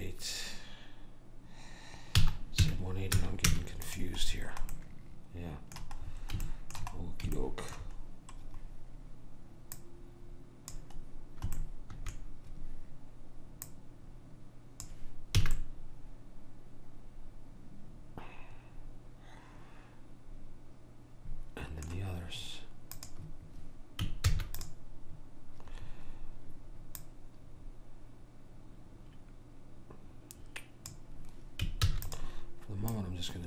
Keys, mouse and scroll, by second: 4.5-9.9 middle drag, 9.9 click, 11.7-13.8 middle drag, 13.8 click, 15.6 a, 15.7-17.7 middle drag, 23.1 click, 24.3 shift+d, 27.1 click, 32.0 shift+d, 33.1 click.